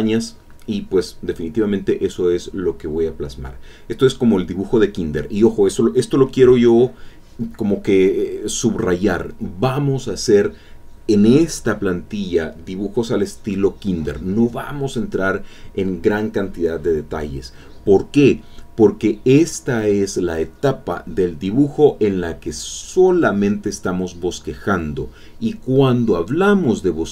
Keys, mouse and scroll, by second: 3.0-5.4 drag, 5.7 click, 6.6 click, 7.1 click, 8.9-10.4 drag, 11.6-14.2 drag, 14.2-16.0 drag, 16.1-21.0 drag, 24.1 click, 26.6 click.